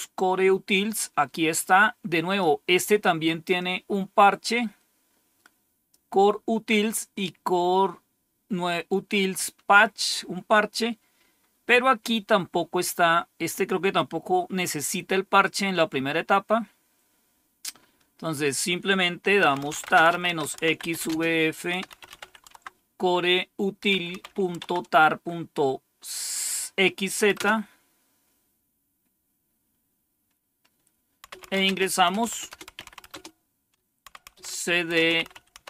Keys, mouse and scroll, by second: 0.8-2.3 drag, 3.4-5.8 drag, 10.4 click, 11.3-12.6 scroll down 3, 12.6-13.2 scroll down 1, 14.1-14.9 scroll down 2, 17.0-17.7 scroll down 2, 18.3 click, 19.2-24.9 typing, 27.2 Return, 30.9-35.6 typing.